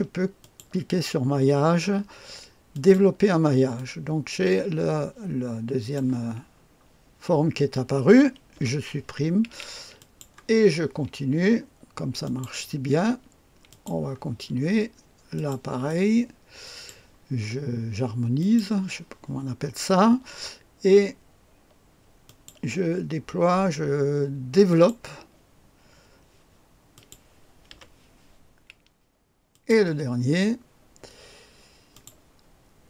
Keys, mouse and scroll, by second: 0.4 click, 2.7 click, 3.8-6.0 drag, 6.4-8.5 scroll down 1, 8.5 Delete, 10.0 click, 12.2 click, 13.7 click, 14.6-15.4 scroll down 1, 15.4-17.0 drag, 18.4 click, 22.2 click, 24.7 click, 25.0 click, 26.9 click, 27.7 Delete, 29.5 click, 31.9 click.